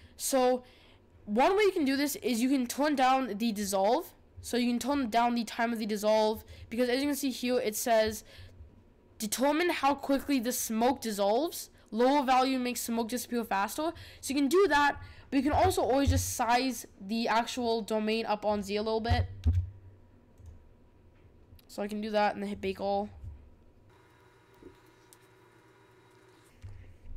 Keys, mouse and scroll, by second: 5.0-6.4 drag, 15.1-15.5 scroll down 1, 15.5 s, 19.2 g.